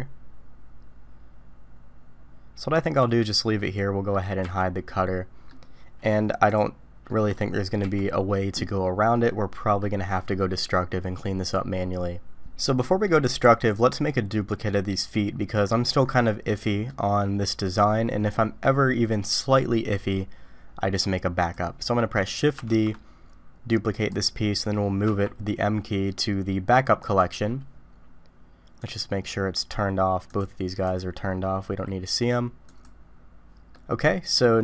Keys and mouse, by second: 3.6-4.1 middle drag, 4.4 h, 4.9-5.5 middle drag, 7.1 middle drag, 7.8 h, 9.1-9.8 middle drag, 12.5-13.0 middle drag, 13.7-14.7 drag, 14.7-15.6 middle drag, 16.6 middle drag, 17.7-18.3 middle drag, 21.4 click, 22.0 middle click, 22.8 shift+d, 25.1 m, 28.9 click, 30.3 click, 30.9 click, 33.7-34.3 middle drag.